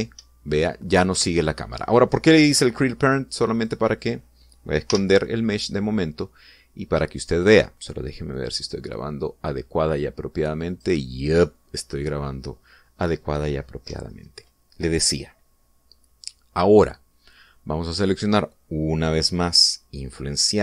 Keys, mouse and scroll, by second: 0.5 p, 0.9 Up, 1.9 Escape, 4.3 right click, 5.7 h, 9.1 click, 11.5 click.